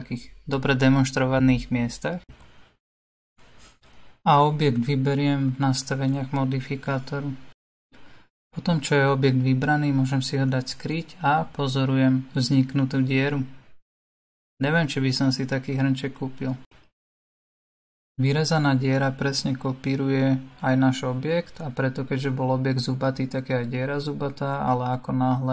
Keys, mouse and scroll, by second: 3.3-6.1 drag, 6.1 click, 6.9 click, 9.7-11.9 middle drag, 11.9 scroll up 2, 12.0 scroll down 1, 12.1-12.5 scroll up 2, 13.4-19.7 middle drag, 19.7 click, 20.9-21.8 right drag, 21.8 click, 22.2-25.2 right drag, 25.2 click.